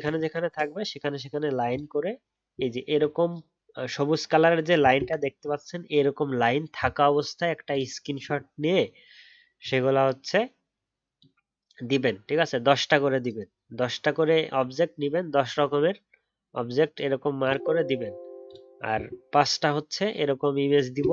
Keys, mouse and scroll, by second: 0.2 ctrl+z, 2.7-5.7 alt+scroll up 1.